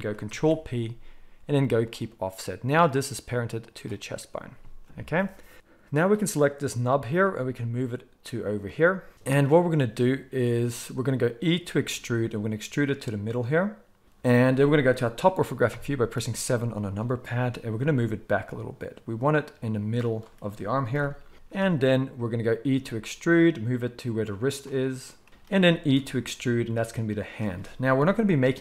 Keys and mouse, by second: 0.2 ctrl+p, 2.7 click, 3.3 middle click, 3.6 click, 3.7-5.9 middle drag, 5.9-7.2 drag, 7.2-17.1 middle drag, 7.2 g, 11.9 e, 15.7 KP_7, 17.7 g, 20.9 KP_1, 22.7-25.3 middle drag, 22.7 e, 25.9 e, 27.9 KP_7.